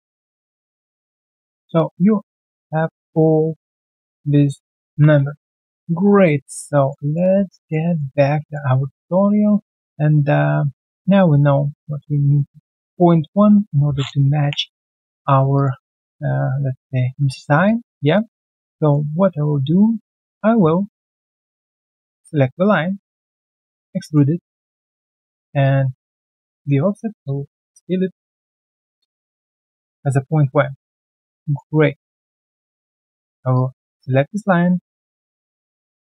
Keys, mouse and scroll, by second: 1.2 alt+middle click, 1.6 alt+click, 1.8 alt+right click, 2.2 alt+middle click, 4.9 alt+b, 5.9 alt+right click, 6.4 alt+middle click, 6.7 alt+right click, 7.0 alt+click, 7.8 alt+right click, 8.0 alt+middle click, 8.4 alt+click, 8.9 alt+right click, 9.4 alt+middle click, 10.3 alt+right click, 10.8 alt+middle click, 11.0 alt+right click, 11.2 alt+click, 12.2 alt+click, 13.6-14.3 scroll down 1, 15.3 Delete, 15.5 alt+click, 15.8 alt+right click, 17.0-17.3 alt+scroll down 2, 17.3 ctrl+1, 17.6 alt+click, 18.0 alt+middle click, 18.2 alt+scroll down 1, 18.4 alt+click, 18.7 alt+middle click, 19.7 alt+right click, 21.1 alt+right click, 21.4 right click, 22.1 double click, 22.4-22.9 alt+scroll down 1, 22.9 shift+right click, 23.7 alt+right click, 23.9 alt+middle click, 25.4 double click, 28.9 typing, 28.9 Return, 30.6 alt+middle click, 31.1 right click, 31.6-32.0 scroll down 1, 32.1 alt+right click, 33.5 shift+click, 33.6 shift+double click.